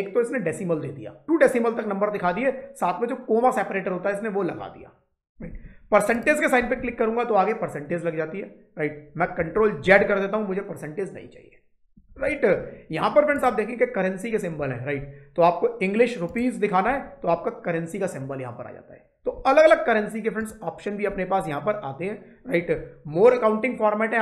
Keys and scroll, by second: 9.7 ctrl+z.